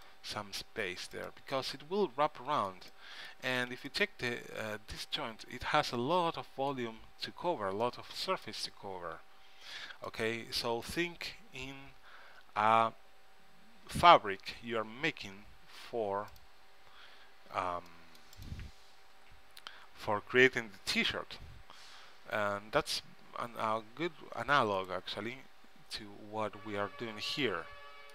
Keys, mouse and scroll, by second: 3.9 z, 8.0-9.3 middle drag, 9.3 z, 11.6 KP_3, 12.1 middle click, 13.9 g, 14.1 middle click, 17.7 c, 19.3 g, 27.1-28.1 middle drag.